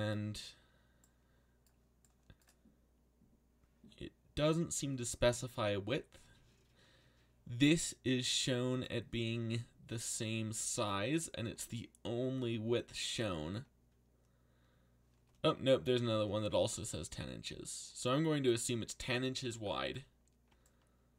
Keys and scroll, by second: 19.0 a.